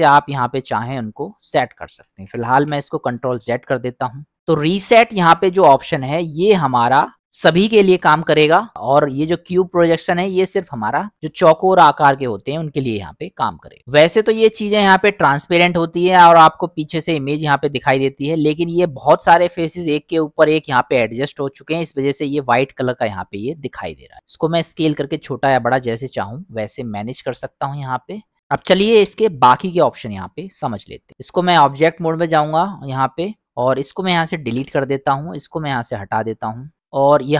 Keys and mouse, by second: 2.3 ctrl+z, 5.7 u, 9.0 u, 13.8 middle click, 22.9-24.1 drag, 24.6 s, 27.3 g, 31.1 click, 33.4 middle drag, 33.6 click, 34.5 Delete, 35.8 click.